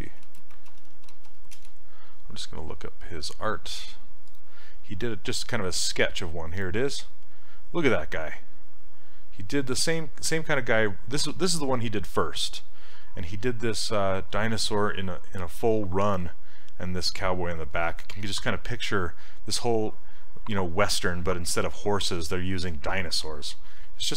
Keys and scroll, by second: 0.0-1.0 typing, 1.6 Return.